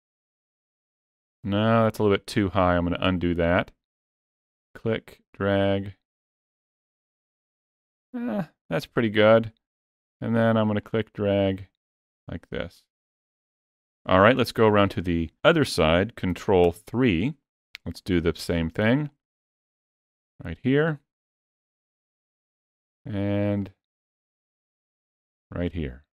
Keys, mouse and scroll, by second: 1.9 ctrl+z, 4.5 click, 10.7 click, 16.5 ctrl+KP_3, 18.9 click, 23.6 click.